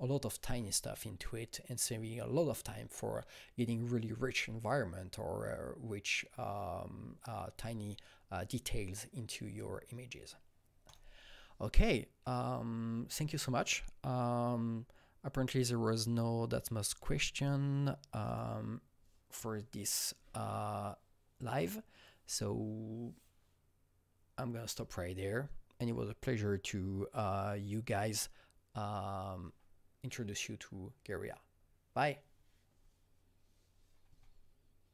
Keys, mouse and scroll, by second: 10.8-14.5 alt+drag, 18.5 click.